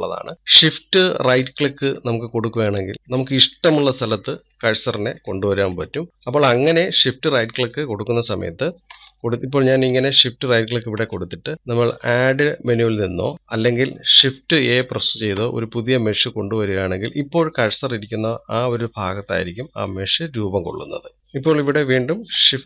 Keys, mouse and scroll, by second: 1.3 shift+right click, 2.4 shift+right click, 3.1 shift+right click, 3.7 shift+right drag, 4.2 shift+right drag, 4.7 shift+right click, 5.1 shift+right click, 5.7 shift+right click, 6.4 shift+right click, 6.9 shift+right click, 7.5 shift+right click, 8.1 shift+right click, 8.6 shift+right click, 10.4-11.5 middle drag, 11.5 shift+right click, 17.7 shift+a, 18.8-21.3 middle drag.